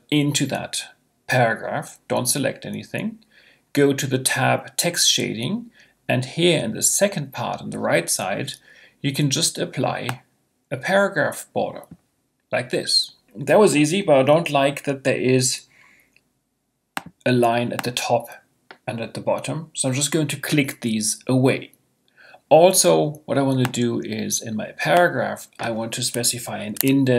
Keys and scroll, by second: 26.3 5, 26.7 Tab.